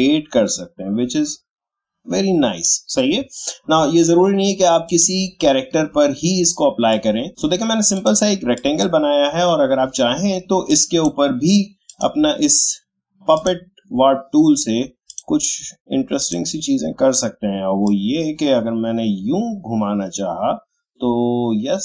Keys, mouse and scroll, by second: 3.3 scroll down 2, 3.5 alt+scroll up 1, 5.6 alt+scroll down 1, 6.9 click, 7.9-21.8 drag.